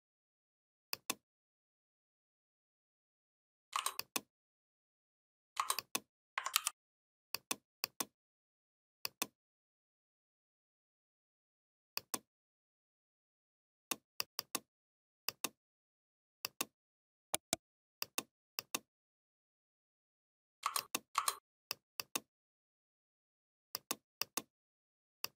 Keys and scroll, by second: 6.3 ctrl+g.